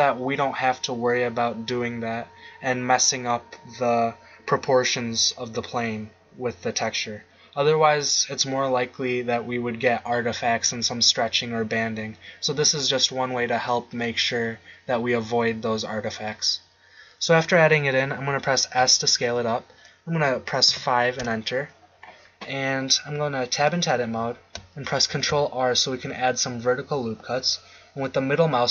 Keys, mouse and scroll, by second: 18.7 s, 23.5 Tab, 25.1 ctrl+r.